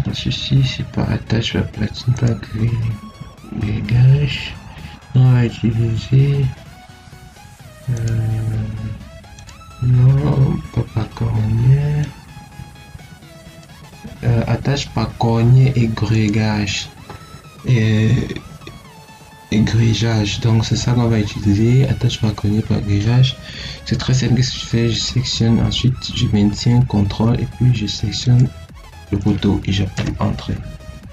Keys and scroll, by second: 29.8 Return.